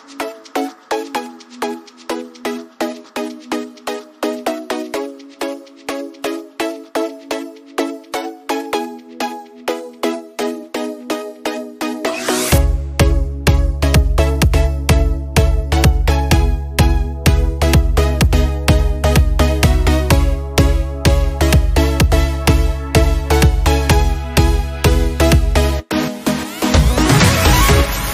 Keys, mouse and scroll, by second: 4.7 click, 5.7 scroll up 1, 7.6 scroll down 1, 9.0 click, 11.1 alt+scroll down 1, 12.1 alt+scroll up 1, 12.9 alt+scroll up 1, 14.2 space, 14.7 click, 14.9 space, 17.0 click, 23.9 click, 28.0 click.